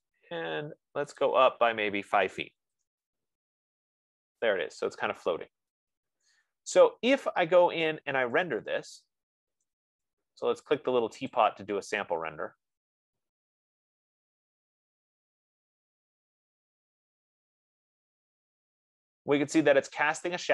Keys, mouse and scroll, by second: 1.6 click, 3.0 5, 3.4 Return, 3.9 click, 3.9 scroll, 6.9 right click, 7.4 scroll, 8.0 scroll, 9.6 right click, 11.7 click.